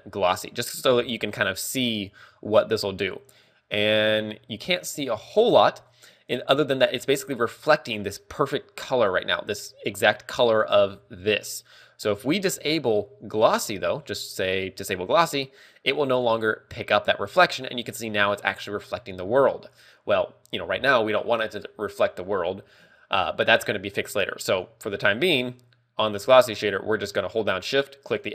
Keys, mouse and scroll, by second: 1.1 click, 4.6-5.1 scroll up 2, 5.7 shift+middle click, 10.2 right click, 12.8 click, 15.3 click, 25.2 right click, 26.5 click.